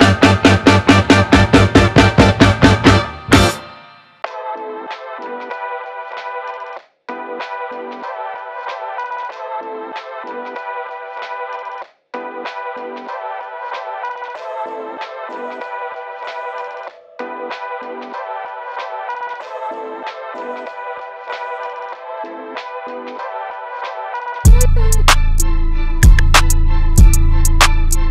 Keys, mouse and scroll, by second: 0.7 right click, 1.8 click, 5.0-6.4 typing, 7.8 click, 9.6-11.2 typing, 12.9-20.4 drag, 21.8-28.1 drag.